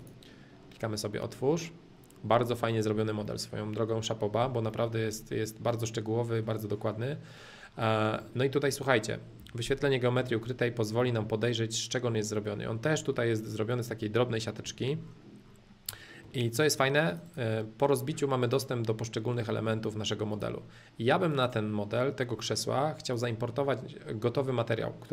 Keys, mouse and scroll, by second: 0.0-2.0 drag, 3.2-4.6 middle drag, 4.8 shift+middle click, 5.1 scroll, 5.2-5.7 scroll down 1, 5.7-6.9 middle drag, 6.9 scroll down 1, 7.1-8.1 scroll down 1, 8.1 scroll up 2, 8.2-9.4 middle drag, 9.4 h, 9.6 middle click, 10.5-11.1 scroll up 2, 11.1-13.7 middle drag, 13.7 click, 14.1 middle click, 14.6 h, 15.0-15.8 scroll down 2, 15.8 middle click, 16.6-18.6 drag, 19.3-19.7 scroll down 2, 19.7 middle click, 20.3-22.3 drag, 22.3 middle click, 23.1-25.1 drag.